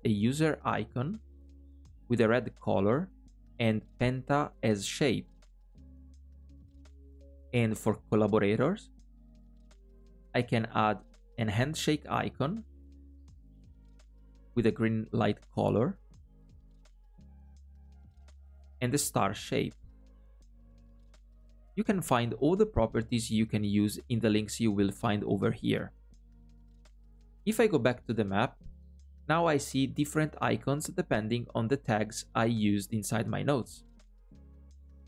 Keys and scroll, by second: 8.1 alt+a.